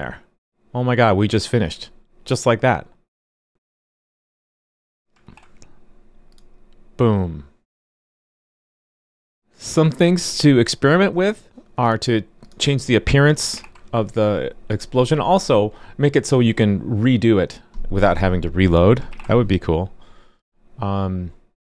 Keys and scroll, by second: 5.2 super+r, 13.5 super+r, 19.1 super+r.